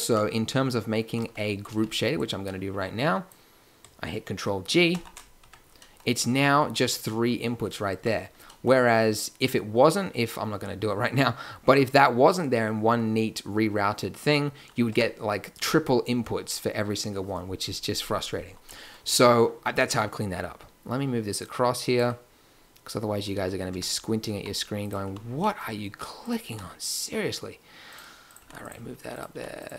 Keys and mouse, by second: 1.0 a, 1.2 a, 1.6 b, 4.8 ctrl+g, 5.4 Tab, 7.9 Tab, 14.9 Tab, 21.3 middle click, 23.3 a, 23.6 b, 24.3 g, 25.0 a, 26.4 g, 28.2 click, 28.4 g, 29.3 g.